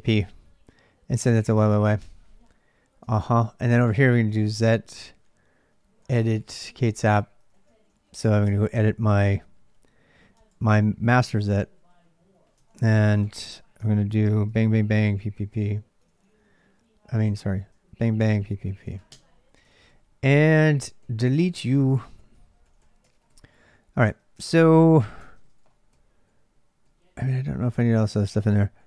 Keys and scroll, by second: 1.2-1.8 typing, 1.8 Return, 2.9 ctrl+a, 3.1 ctrl+a, 3.6-4.4 typing, 5.8-7.9 typing, 8.2 Return, 9.9 1, 10.1 Return, 11.1-15.1 typing, 12.3 ctrl+[, 13.2 Return, 13.6 ctrl+[, 13.6 ctrl+j, 17.1 ctrl+[, 17.1 ctrl+j, 17.4-18.8 typing, 18.9 Return, 19.4 ctrl+[, 19.5 ctrl+j, 20.5-23.5 typing, 24.1 ctrl+[, 24.2 ctrl+j, 24.5-28.8 typing.